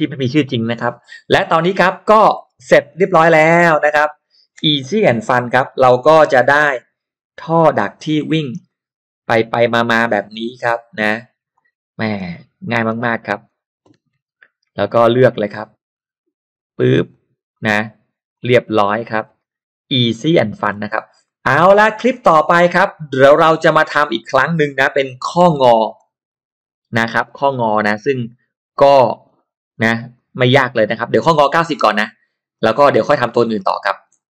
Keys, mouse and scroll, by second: 2.1 click, 2.4-3.2 scroll down 2, 2.8 middle click, 3.2 space, 3.4 click, 5.1 Delete, 5.3-6.1 scroll up 2, 5.6 Delete, 6.2 l, 6.8 click, 7.5 click, 8.5 click, 9.4 click, 10.3 click, 11.4 click, 12.2 space, 12.6 click, 14.0 g, 15.1 click, 17.1 click, 18.3 click, 18.7 scroll up 1, 20.3 middle click, 20.3 scroll up 1, 20.7 scroll down 1, 21.2 scroll up 1, 21.2 middle click, 21.6 scroll down 1, 22.0-22.7 scroll up 2, 22.1 middle click, 23.8 click, 24.9 scroll down 1, 25.1 middle click, 25.6 shift+x, 26.0 click, 27.1 click, 28.0 click, 29.2 shift+click, 30.2 shift+click, 32.6 shift+right click, 33.5 scroll down 1, 33.8 scroll up 1.